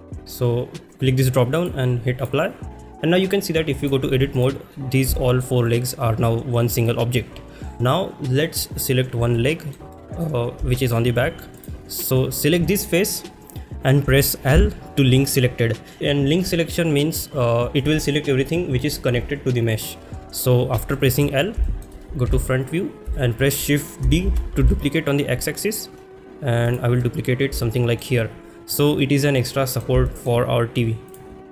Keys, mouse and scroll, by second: 1.6-2.3 drag, 3.3-3.9 drag, 4.4 click, 5.2 shift+middle drag, 9.4 shift+middle click, 9.9 middle click, 10.8 shift+middle click, 11.6 click, 14.5 l, 21.0 middle click, 21.7 shift+middle click, 22.3 KP_1, 23.2 shift+middle click, 24.3 shift+d, 26.7 x, 27.6 shift+middle click, 29.6 middle click, 30.2 shift+middle click, 31.1 click.